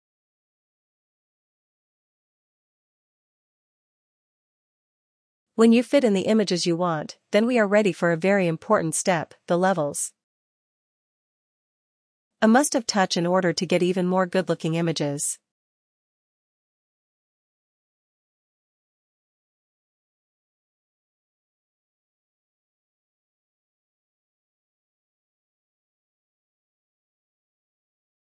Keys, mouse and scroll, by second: 5.3 click, 9.1 click, 11.2 ctrl+t, 14.2 click, 18.4 click, 19.2 click, 21.5 ctrl+t, 23.7 click, 25.6 ctrl+t.